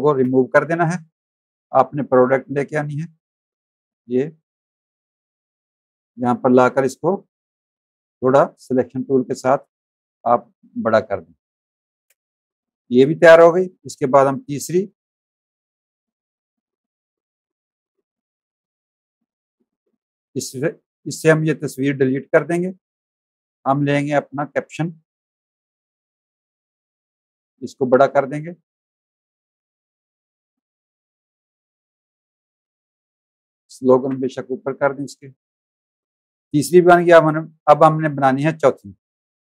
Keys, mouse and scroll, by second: 0.1 Delete, 1.2 click, 1.8 click, 5.2 shift+click, 6.7 click, 9.3 alt+shift+click, 11.5 space, 11.6 click, 12.5 v, 12.6 click, 14.6 alt+click, 17.9 v, 18.4 click, 20.6 click, 21.1 click, 22.2 Delete, 23.1 click, 25.7 shift+click, 28.9 alt+shift+click, 30.1 click, 31.6 click, 33.9 ctrl+shift+], 34.9 click, 35.3 space, 35.4 click, 39.2 click.